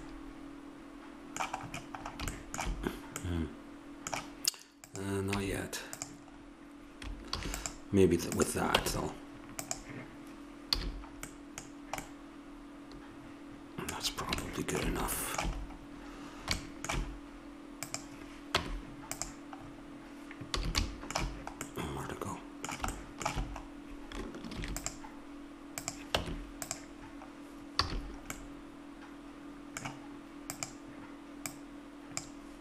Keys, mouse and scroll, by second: 0.5 middle click, 1.4 middle click, 4.8 right click, 5.4 Tab, 6.4 middle click, 6.5 middle click, 7.3 ctrl+r, 8.8 Tab, 10.7 a, 11.7 middle click, 13.8 middle click, 16.6-17.8 middle drag, 17.8 click, 18.5 Tab, 20.6 a, 24.5 ctrl+r, 26.2 Tab, 27.0 middle click, 27.9 a, 30.5-32.6 drag.